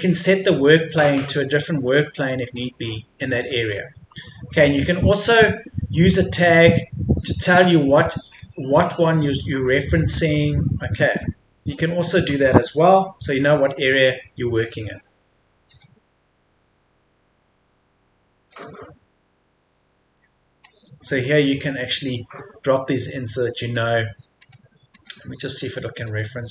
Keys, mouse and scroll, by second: 3.8-4.1 scroll down 1, 4.1 middle click, 4.7 scroll up 1, 6.5-7.0 scroll down 1, 7.0 middle click, 7.5-8.4 scroll up 1, 8.4-9.1 scroll down 1, 9.1 middle click, 9.6 scroll up 1, 10.2-10.8 scroll down 1, 10.8 middle click, 11.7-15.7 scroll up 1, 15.7 click, 19.8-20.6 scroll up 1, 23.7 click.